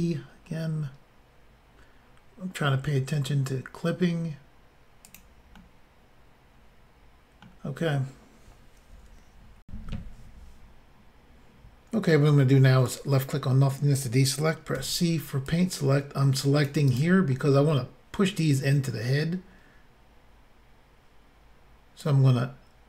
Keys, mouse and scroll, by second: 5.1 click, 5.2 click, 5.6 middle click, 9.7 Insert, 12.9 click, 12.9 click, 14.8 c, 15.5 click, 16.9 right click, 17.3 middle click, 22.0 click.